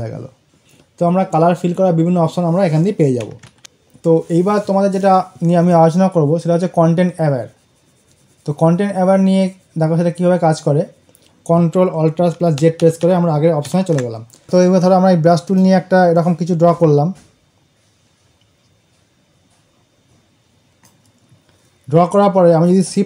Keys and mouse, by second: 3.5 ctrl+z, 5.5 click, 11.5 ctrl+alt+z, 12.5 ctrl+alt+z, 15.3-22.9 drag.